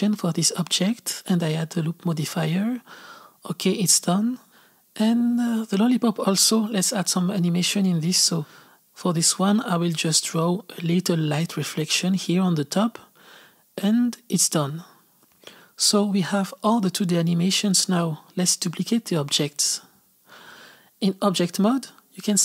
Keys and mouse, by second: 0.0 space, 0.0 click, 0.5 click, 1.1 z, 1.2 click, 1.3 z, 1.4 click, 1.4 space, 2.0 click, 2.2 space, 2.3 click, 2.9 click, 3.5 Up, 3.6 click, 3.9 space, 4.1 space, 5.7-7.0 drag, 8.0 click, 8.5 middle click, 8.7 click, 9.1 click, 9.4 click, 9.8 click, 10.4 click, 11.0 z, 11.1 click, 11.3 click, 11.6 click, 11.9 click, 12.4 click, 12.8 space, 13.5 click, 13.5 s, 13.6-14.6 drag, 14.7 s, 19.6-22.4 drag.